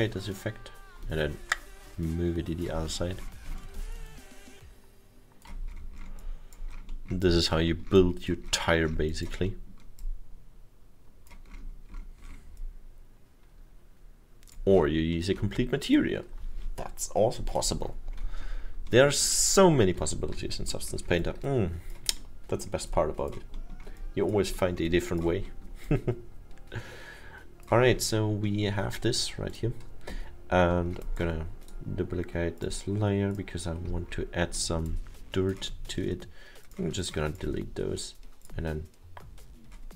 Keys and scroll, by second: 20.0 F2, 22.5 alt+7.